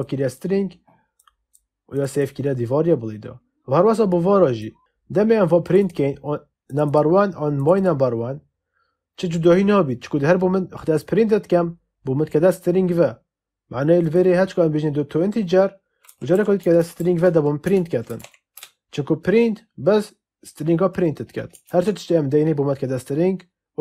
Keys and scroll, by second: 15.7-18.6 typing.